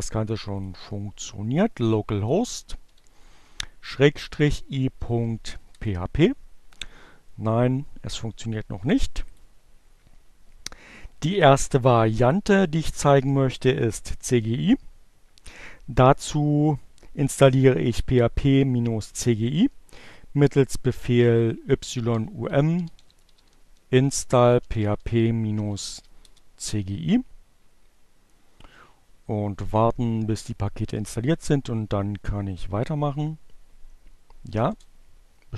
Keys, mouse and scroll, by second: 1.2 click, 1.4 shift+7, 3.5-5.4 typing, 9.0 click, 18.4-19.3 typing, 21.2-25.9 typing, 34.8 j, 35.0 Return.